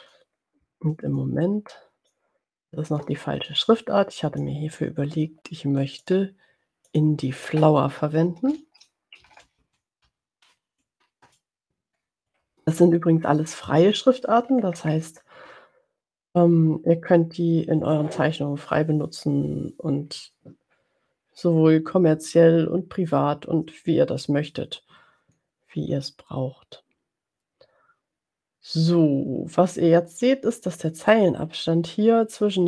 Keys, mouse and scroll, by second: 0.0 click, 1.1-2.5 ctrl+drag, 2.9-4.7 ctrl+drag, 6.0 click, 6.8 click, 9.0-10.4 typing, 10.8 Down, 11.1 Return, 13.8 click, 14.4-15.1 ctrl+scroll up 2.